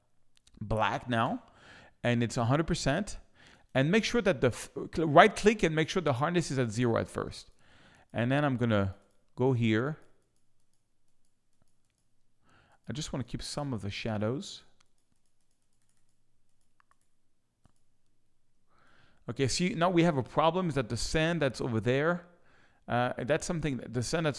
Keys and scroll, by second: 1.2 x, 18.5 space, 23.2 space.